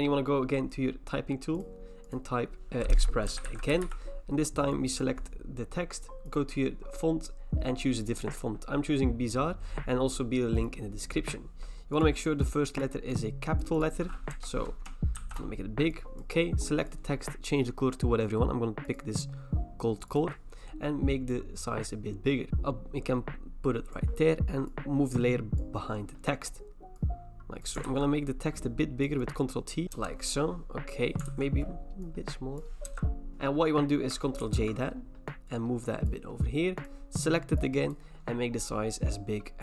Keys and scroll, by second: 2.9-4.3 typing, 6.6-7.4 typing, 14.3 BackSpace, 15.2 x, 27.9 ctrl+t, 29.9 Return, 31.3 ctrl+t, 32.9 Return, 34.4 ctrl+j.